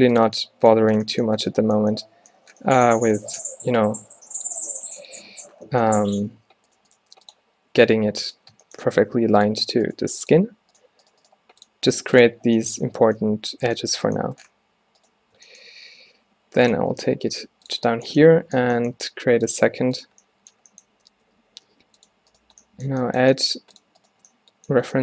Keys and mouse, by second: 3.5 g, 4.1 drag, 4.2 g, 4.8 g, 6.5 g, 7.1 g, 8.7 drag, 9.0 e, 10.1 g, 11.0 g, 11.3 g, 12.0 g, 14.6 z, 16.0 shift+d, 16.9 z, 17.4 g, 18.8 g, 19.7 g, 20.2 middle drag, 21.3 e, 23.2-24.9 drag, 23.3 g.